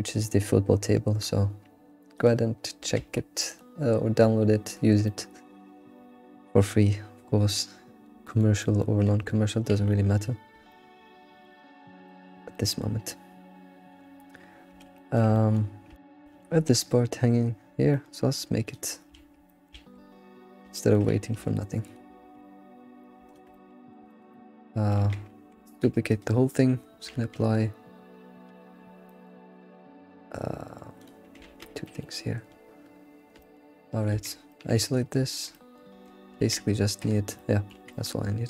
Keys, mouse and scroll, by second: 2.3 click, 3.6 middle click, 4.0-4.7 scroll down 3, 4.7-5.1 scroll down 3, 5.1-7.9 middle drag, 8.0 middle drag, 8.3 alt+middle click, 8.6 alt+middle click, 9.3-9.6 scroll up 2, 10.7-11.7 middle drag, 11.7 scroll down 1, 12.2-14.2 middle drag, 14.5-18.2 shift+middle drag, 18.2-18.7 scroll up 3, 18.7 click, 19.2 alt+shift+z, 19.5 middle click, 19.8 alt+shift+z, 20.1-20.5 scroll up 3, 20.8 shift+middle click, 21.4 Tab, 21.5 Tab, 21.8 click, 22.2 alt+x, 23.2 shift+click, 23.5-25.0 middle drag, 25.1 Tab, 25.3 scroll down 2, 25.7 shift+d, 27.1 ctrl+a, 29.1-31.0 middle drag, 31.0-31.5 drag, 31.5 ctrl+a, 31.9-33.5 middle drag, 33.5 ctrl+a, 34.2 alt+q, 34.5-36.0 middle drag, 36.0 Tab, 36.0 Tab, 36.3 alt+x, 37.4 middle click, 37.7 alt+x, 37.9-38.4 middle drag.